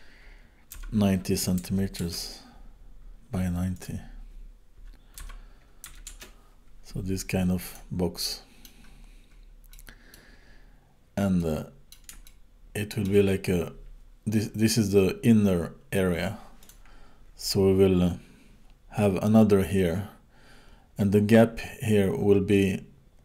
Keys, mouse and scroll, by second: 3.8 click, 7.7 click, 8.2 middle click, 9.0-9.7 scroll up 8, 9.7 middle click, 10.5-11.0 scroll up 3, 11.0 scroll down 2, 11.4 middle click, 12.3 shift+middle click, 16.6 click.